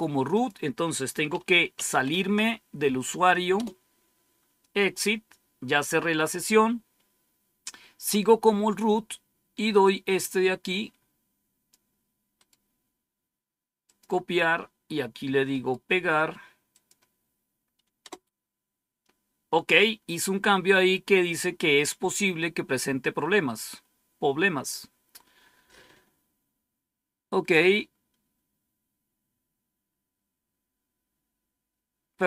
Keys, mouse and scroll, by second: 1.2-2.5 typing, 3.5 Return, 9.8-12.1 drag, 12.3 right click, 13.8 click, 15.4 right click, 16.0 right click, 16.7 click, 18.0 Return, 22.7-23.2 scroll down 1, 23.2-24.0 scroll down 1, 30.7 scroll down 1.